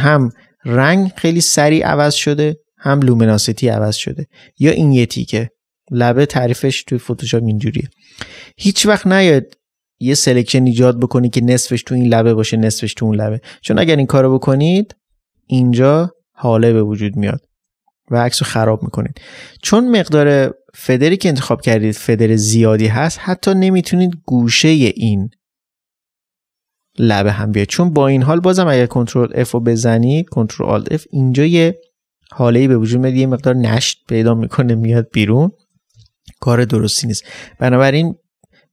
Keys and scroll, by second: 8.0 ctrl+space, 13.9 ctrl++, 14.5 ctrl+alt+f, 17.3 ctrl+alt+f, 18.2 ctrl+d, 18.6 ctrl+space, 28.9 ctrl+alt+f, 34.7 ctrl+alt+f, 35.9 space.